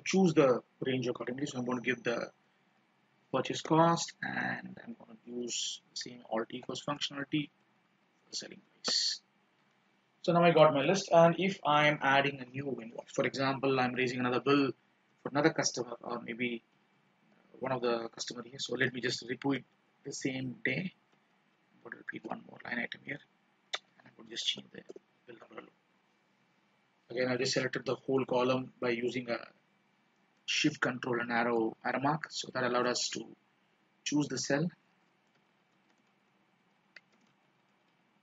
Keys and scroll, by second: 2.7 ctrl+shift+Down, 6.8 alt+=, 8.6 ctrl+shift+Down, 21.8 ctrl+d.